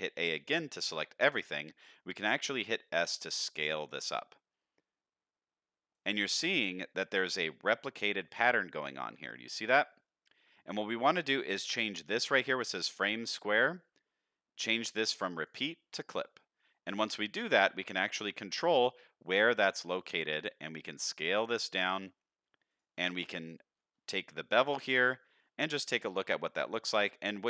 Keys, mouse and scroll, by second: 2.1 s, 6.6-8.0 scroll up 1, 8.0 middle click, 8.0-8.4 scroll up 1, 9.2 middle click, 12.2-13.0 drag, 15.3 click, 17.0-17.8 scroll down 2, 17.4 middle click, 20.7 s, 24.8 Tab, 25.3-25.7 scroll up 2, 25.8 shift+middle drag, 26.8-27.4 shift+drag.